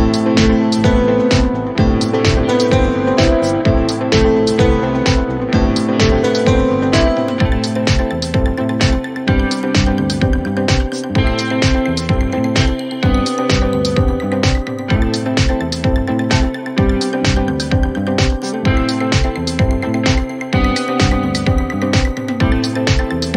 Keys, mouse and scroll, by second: 2.8-23.3 middle drag.